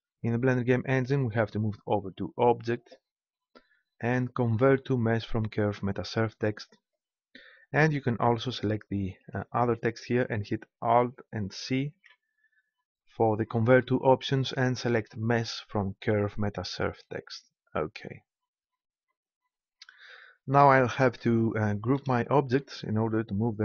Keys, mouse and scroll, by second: 2.1-3.6 drag, 9.2-10.9 right drag, 11.9 alt+c.